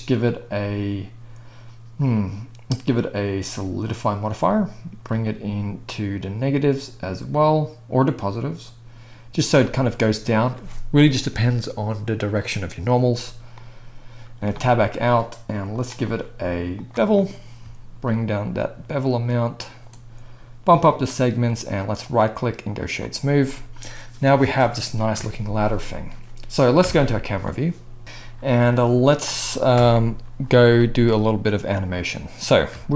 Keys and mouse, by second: 0.2-26.8 drag, 14.5 Tab, 22.1-26.8 middle drag, 22.1-26.8 right drag, 25.1 KP_1, 26.8 KP_0, 29.7 KP_0.